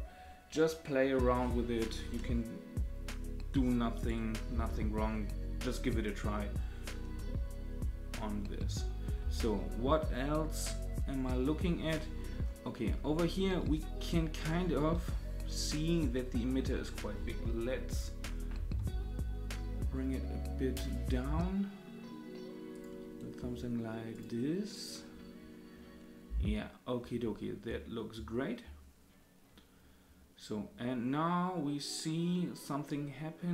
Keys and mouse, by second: 4.5 space, 9.2 space, 10.6-12.0 drag, 17.9 click, 18.8 s, 24.1 click, 24.7 click.